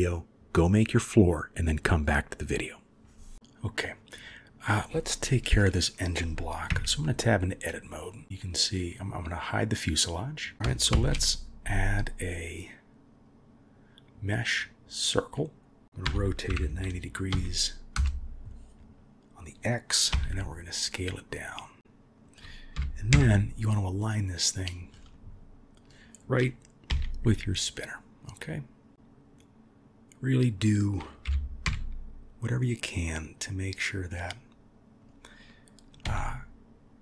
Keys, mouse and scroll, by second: 0.0 ctrl+r, 2.6 click, 3.3-3.9 middle drag, 6.7 Tab, 7.9 middle click, 9.3 click, 10.9 shift+a, 15.8 ctrl+z, 16.0 r, 22.7 g, 31.2 g.